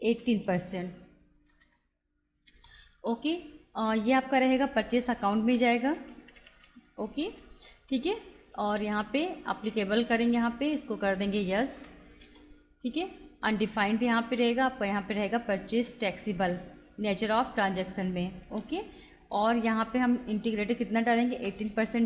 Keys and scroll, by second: 0.2 1, 0.5 8, 1.5 shift+5, 2.5 Return, 5.6 Up, 7.3 Return, 8.8 Return, 10.1 Return, 11.8 y, 12.3 Return, 14.2 Return, 15.5 Down, 18.6 Return, 21.3 1, 21.7 8.